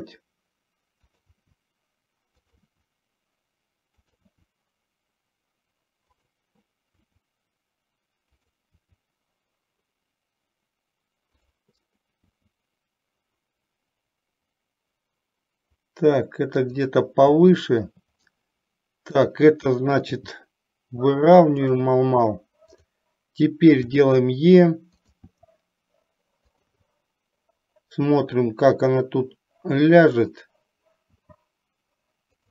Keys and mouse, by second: 1.6 e, 2.8 e, 4.3 e, 7.2 e, 12.6 e, 17.6 shift+middle click, 19.2 click, 20.2 g, 24.1 e, 25.4 e, 31.3 e.